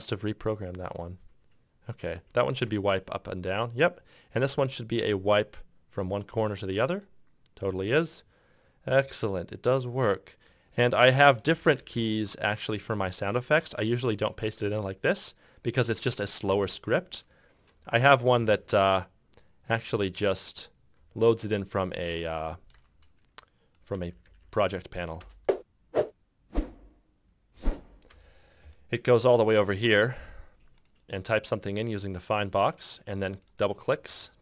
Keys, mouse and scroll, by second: 0.4 w, 2.3 shift+click, 5.2 e, 7.1 shift+click, 11.6 f, 11.8 f, 11.9 f, 16.7 c, 18.5 F5, 21.1 F7, 22.2 F8, 24.2 g, 24.2 g, 24.4 g, 25.3 space, 28.3 space.